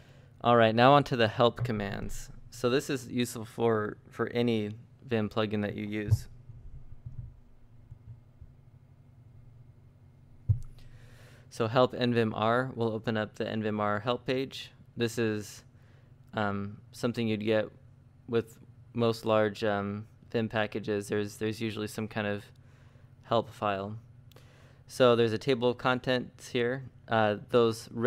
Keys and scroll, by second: 1.0-2.7 typing, 7.3-12.2 typing, 14.0 j, 15.5 ctrl+Up, 15.7 ctrl+Up, 16.0 ctrl+Down, 16.2 ctrl+Down, 18.3 ctrl+d, 18.9 ctrl+d, 19.6 ctrl+d, 19.8 ctrl+u, 20.0 ctrl+u, 20.1 ctrl+u, 21.1-25.6 typing.